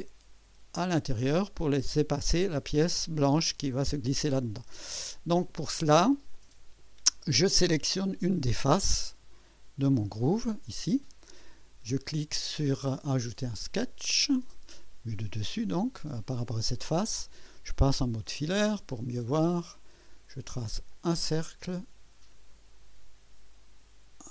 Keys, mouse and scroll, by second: 6.3-7.0 drag, 7.1-7.4 scroll up 1, 7.7 right click, 9.9 click, 13.4 click, 18.1 click, 18.1 typing, 20.9 click.